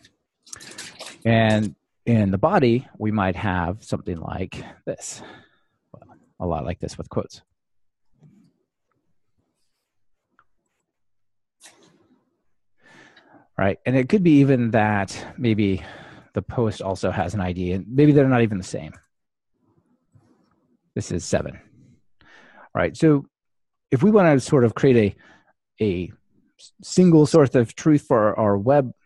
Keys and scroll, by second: 6.5 super+c, 8.0 super+v.